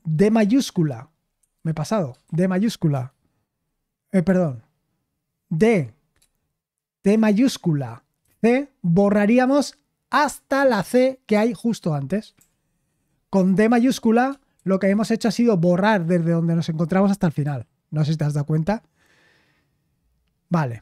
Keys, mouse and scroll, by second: 0.4 shift+d, 1.4 Escape, 1.5 u, 2.2 shift+d, 4.2 u, 5.6 d, 7.1-8.7 typing, 12.2 Escape, 12.3 u, 14.5 shift+d, 17.4 typing, 19.5-20.8 scroll down 1.